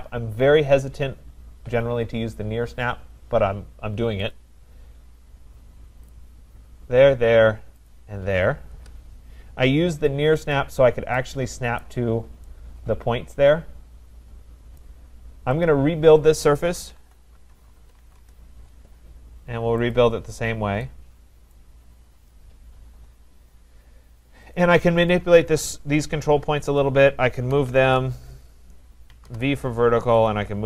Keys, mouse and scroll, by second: 4.3 click, 6.1 click, 7.9 click, 8.8 Return, 10.6 click, 11.8 right click, 12.1-12.5 scroll, 14.8 right click, 15.6 click, 16.7-18.5 typing, 19.9 click, 21.6 right click, 21.9-22.6 scroll, 22.6-24.5 scroll, 24.5 click, 25.2 click, 26.8 shift+click, 27.3-29.6 typing, 30.3 click.